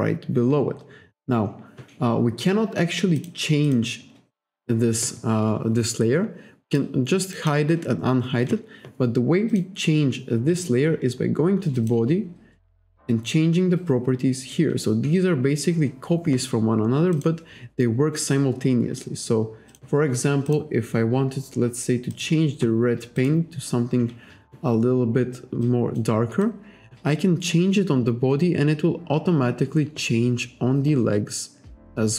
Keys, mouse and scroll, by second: 3.2 click, 3.7 click, 6.7 click, 7.3 click, 9.5 click, 11.8 click, 17.2 click, 19.7 click, 20.5 click, 20.9-21.3 scroll down 1, 22.1 click, 23.2 click, 25.6 click, 26.4 click.